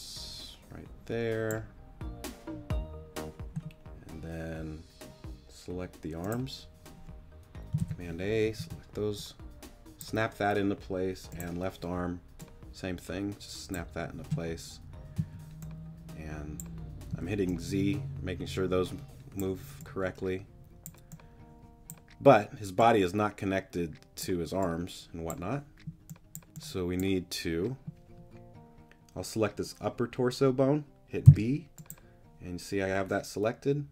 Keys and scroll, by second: 7.8 super+a, 8.4 super+t, 15.2 z, 17.1 z, 31.2 b.